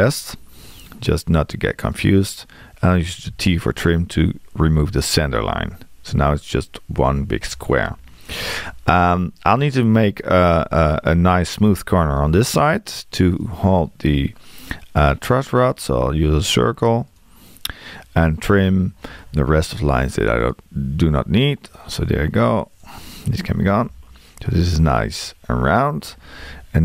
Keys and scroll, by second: 3.3 t, 18.6 t.